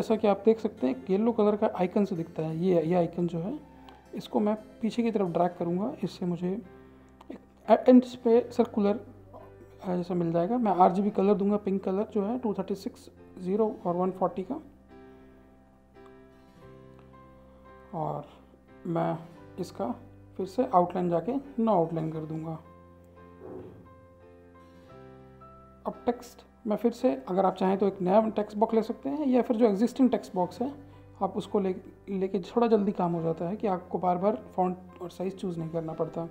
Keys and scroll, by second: 10.7 typing, 11.6 Tab, 12.4-14.5 typing, 33.3 ctrl+c, 33.7 ctrl+v.